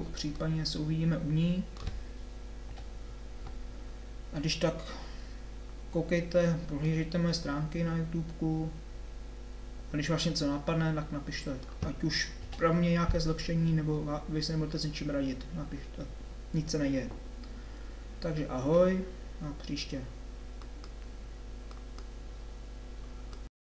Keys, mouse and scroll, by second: 0.5-1.6 middle drag, 2.7 KP_7, 12.5 KP_7.